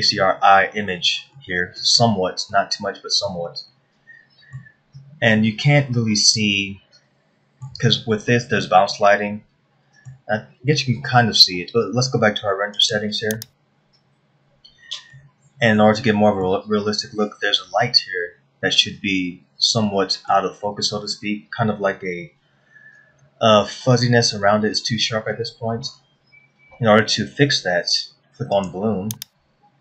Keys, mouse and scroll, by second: 2.0 middle click, 3.1 middle click, 5.6 middle click, 5.6-6.4 scroll down 1, 7.0 shift+middle click, 8.8 scroll down 1, 9.2 middle click, 13.4 click, 15.7 middle click, 19.4 scroll up 1, 20.4 shift+middle click, 29.7 click.